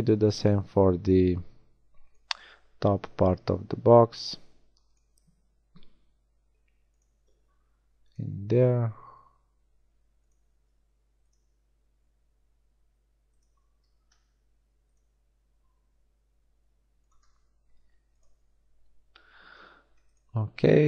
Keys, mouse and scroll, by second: 0.1 ctrl+r, 4.4 ctrl+r, 7.2 ctrl+r, 10.6 ctrl+r, 13.7 ctrl+r, 17.3 ctrl+r.